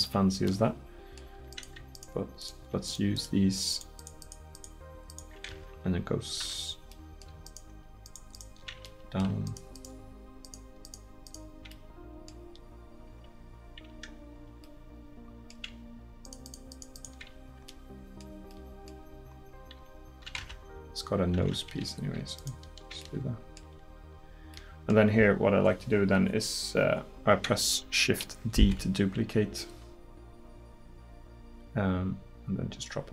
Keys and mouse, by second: 1.5-4.5 right drag, 11.9 middle click, 17.3-18.5 middle drag, 24.6 middle click, 28.6 shift+d.